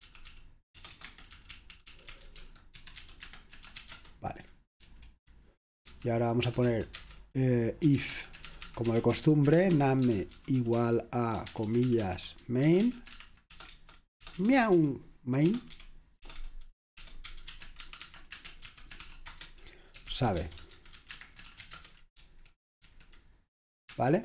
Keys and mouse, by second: 0.0-4.8 typing, 1.1 Escape, 5.9-22.9 typing, 23.9 typing.